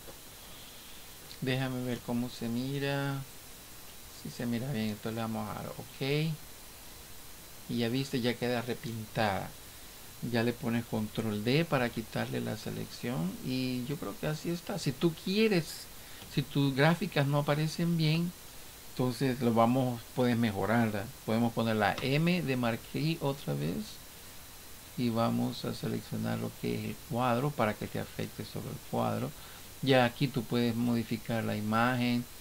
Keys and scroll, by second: 11.8 ctrl+d.